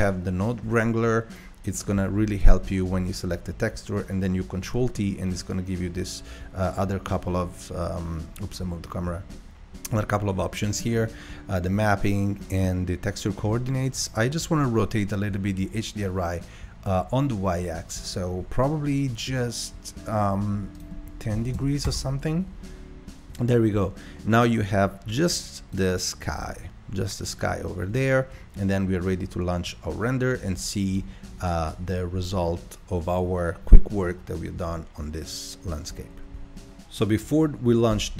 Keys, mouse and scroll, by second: 2.5-5.5 drag, 5.5-6.0 scroll down 4, 6.1-6.4 scroll down 3, 7.7-8.5 scroll up 5, 8.7 scroll down 1, 10.6 middle click, 11.0-11.6 scroll up 5, 11.7-12.2 scroll up 2, 12.2-13.7 middle drag, 13.7 scroll up 3, 13.8-14.4 scroll down 1, 22.1 click, 25.3-28.6 drag.